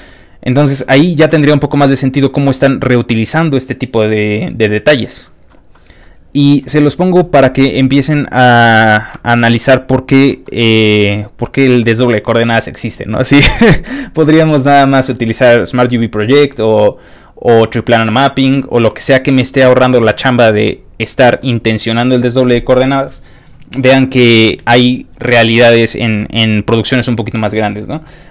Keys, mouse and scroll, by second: 0.1 scroll down 2, 0.4 scroll up 2, 4.9 alt+middle click, 5.7 alt+middle click, 6.8-7.4 scroll down 5, 8.1 ctrl+scroll up 1, 9.0 scroll down 2, 9.2-10.3 ctrl+scroll up 2, 10.3-10.6 ctrl+scroll up 1, 10.4 ctrl+middle click, 11.0 ctrl+middle click, 15.2 ctrl+middle click, 18.5 ctrl+middle click, 19.2 ctrl+middle click, 21.0 ctrl+middle click, 21.3 scroll up 1.